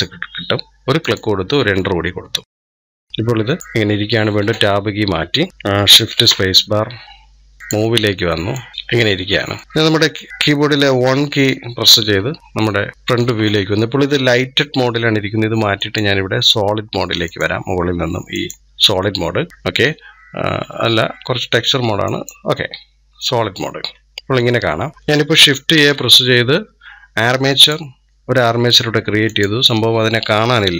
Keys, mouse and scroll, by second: 2.4 click, 2.8-4.1 middle drag, 4.1 Tab, 6.0 shift+space, 8.4 click, 8.7-9.6 shift+middle drag, 9.6 click, 10.9 KP_1, 12.0-12.4 scroll up 2, 12.9-15.2 shift+middle drag, 15.6 click, 17.1 click, 19.5 scroll down 1, 21.9-23.7 drag, 23.7-24.1 scroll up 2, 24.1 scroll down 2, 24.4 scroll up 1, 25.5 shift+a, 29.0 click.